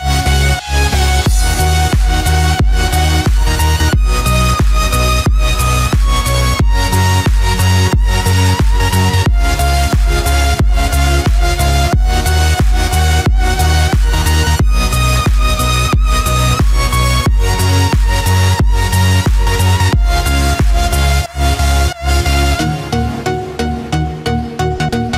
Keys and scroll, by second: 4.8 ctrl+z, 14.3 ctrl+z.